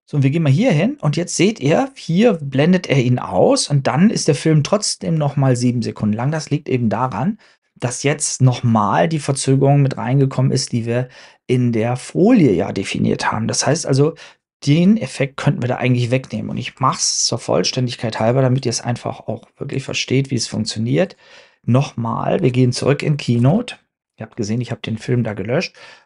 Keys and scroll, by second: 23.4 super+Tab, 24.5 super+Tab.